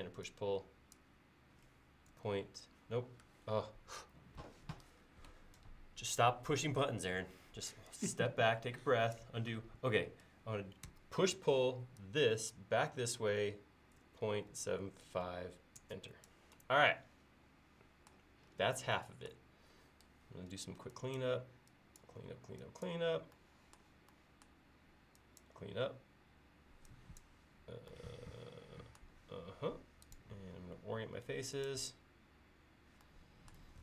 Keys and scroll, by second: 2.2 space, 10.9 p, 14.1-15.1 typing, 20.5 e.